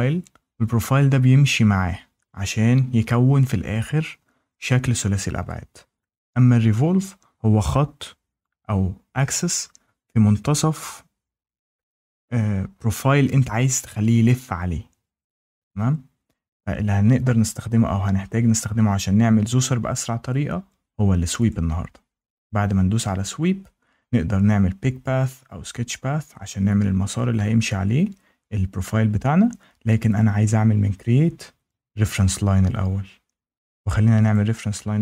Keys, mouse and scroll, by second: 21.4 click, 30.1 click, 32.0 click, 34.2 click.